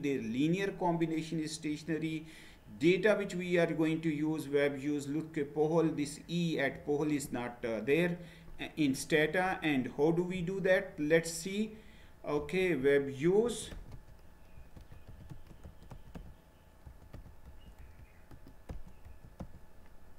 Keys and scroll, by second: 13.2-20.1 typing.